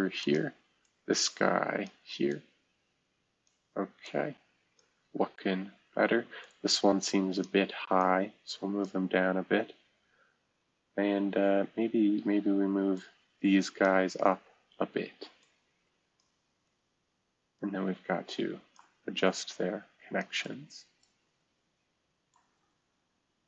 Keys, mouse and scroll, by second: 0.2 click, 0.8-1.9 drag, 2.3-3.5 drag, 4.0-4.8 drag, 6.4-7.4 drag, 8.0 click, 12.9-13.8 drag, 15.4-16.7 drag, 16.7-18.7 right drag, 18.7-20.4 drag, 20.4-22.3 right drag, 22.3-23.4 drag.